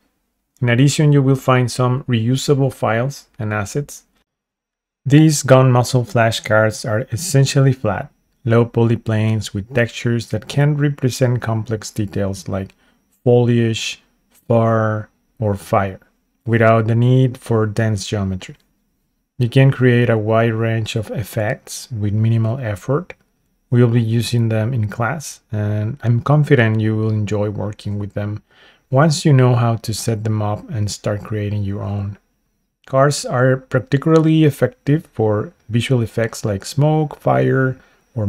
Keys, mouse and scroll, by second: 3.1-4.7 middle drag, 6.1 click, 6.6 z, 8.8-10.6 middle drag, 10.8-11.3 scroll up 3, 11.2 middle click, 11.9-13.0 scroll down 1, 13.0-13.6 scroll down 1, 13.0 z, 14.1 middle click, 14.9 click, 15.3-17.7 middle drag, 18.3 shift+middle click, 19.2 scroll up 1, 20.1-21.5 middle drag, 20.1 scroll up 3, 21.7-22.2 scroll down 2, 22.1 shift+scroll up 1, 22.2 shift+middle click, 22.7 shift+middle click, 23.2 shift+middle click, 23.7 middle click, 25.1 click, 25.3-26.9 middle drag, 27.0-27.5 scroll up 3, 27.7 shift+middle click, 28.2 click, 28.6-30.2 middle drag, 30.9-31.6 scroll down 2, 32.4 click, 32.8 z, 34.4-35.0 scroll up 5, 35.5-37.4 middle drag, 35.5 scroll up 2, 37.8 Tab.